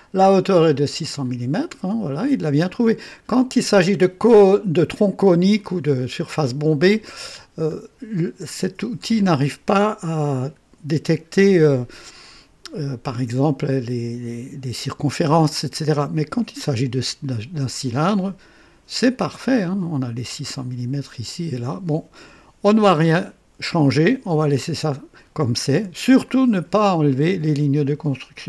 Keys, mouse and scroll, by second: 1.5-2.9 drag, 4.7-6.6 drag, 7.4 scroll down 2, 19.6-20.7 drag.